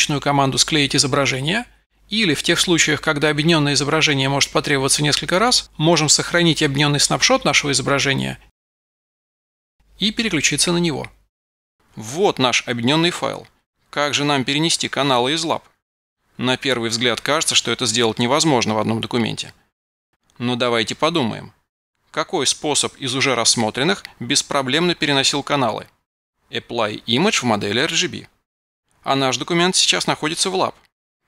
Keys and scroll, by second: 2.0 Escape, 5.6 super+v.